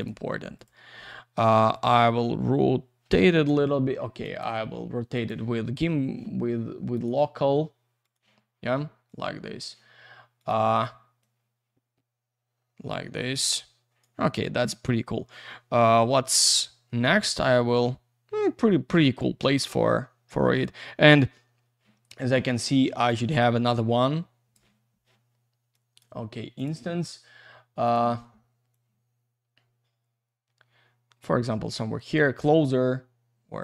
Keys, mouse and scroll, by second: 0.0 click, 0.5 click, 1.7 click, 3.1 Escape, 4.2 click, 5.1 click, 6.9 click, 8.0 click, 9.1 click, 10.4 click, 11.2 click, 15.8 F3, 18.8 F3, 19.5 alt+shift+q, 20.3 w, 23.4 shift+click, 25.7 click, 26.6 click, 27.8 click, 28.7 click.